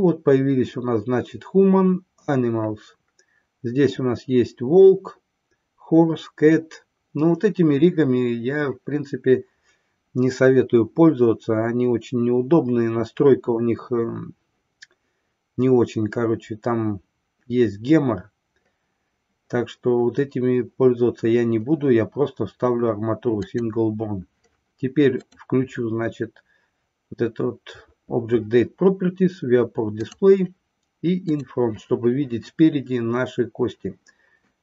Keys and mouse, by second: 30.0 click, 31.3 click.